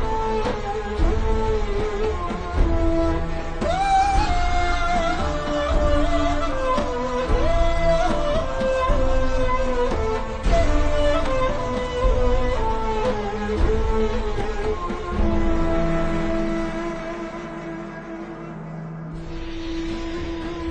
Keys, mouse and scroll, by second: 0.6 ctrl+scroll up 1, 1.1-2.4 alt+shift+scroll up 2, 13.0-13.6 alt+shift+scroll down 2, 14.1-14.4 alt+shift+scroll up 3, 15.0 click, 15.7-16.0 scroll up 1, 16.0 click, 17.0 alt+shift+scroll up 1, 18.6 alt+shift+scroll down 1, 20.4-20.7 alt+shift+scroll up 2.